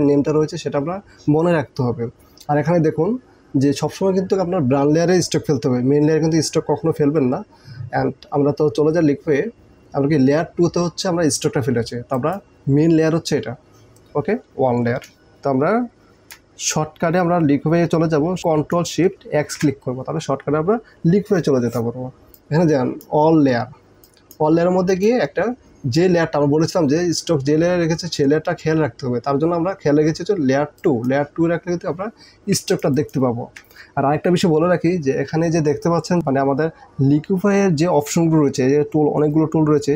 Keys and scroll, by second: 19.4 ctrl+shift+x, 32.7 ctrl+space.